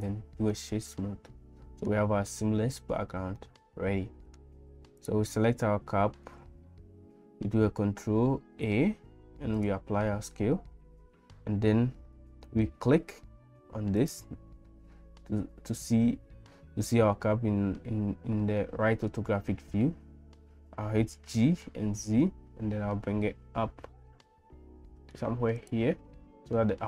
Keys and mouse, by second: 0.5-1.9 middle drag, 3.4 middle click, 5.0 click, 8.5 ctrl+a, 14.0 click, 21.1 g.